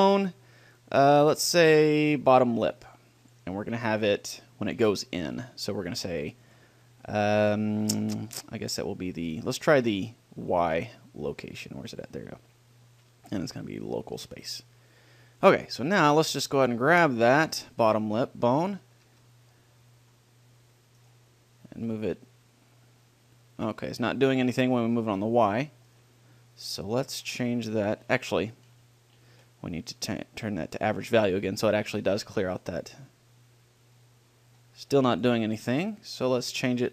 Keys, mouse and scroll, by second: 0.0-3.6 drag, 5.6 middle click, 5.6-6.0 scroll down 1, 6.6-9.0 drag, 12.9 middle click, 13.7-14.8 drag, 15.4 middle click, 16.0-17.8 middle drag, 17.9 click, 17.9-18.9 middle drag, 18.9 right click, 19.3 g, 19.5 middle click, 21.4-23.1 right drag, 22.1-23.9 drag, 26.2-28.2 right drag, 30.1-31.8 drag, 32.8 right click, 33.3-35.0 drag, 35.8-36.9 right drag.